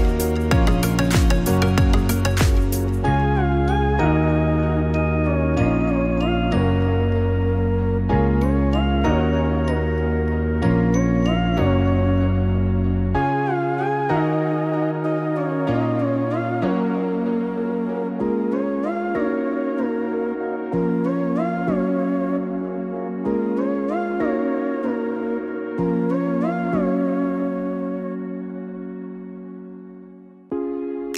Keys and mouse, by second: 8.0 click, 11.2 click, 17.3 click, 18.3 click, 20.4 click, 22.4 click, 27.3-30.4 drag.